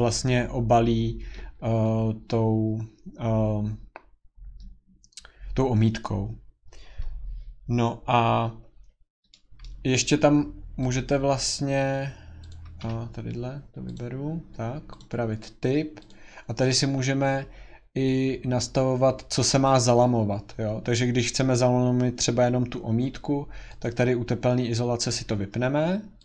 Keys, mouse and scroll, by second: 8.9-9.7 scroll, 9.7 scroll, 10.9 click, 12.5 click, 12.8 Escape, 13.9 click, 15.0 click, 16.1 click, 21.2 click, 23.8-26.2 drag.